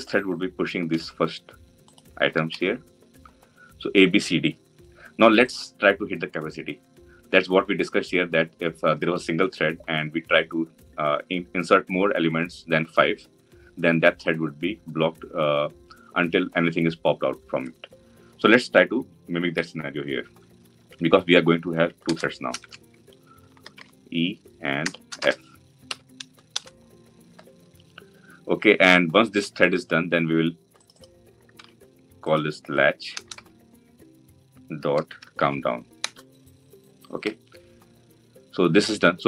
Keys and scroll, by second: 0.8 ctrl+x, 2.6 ctrl+v, 19.3 ctrl+d, 31.3 ctrl+c, 34.6 ctrl+v, 37.4 Return.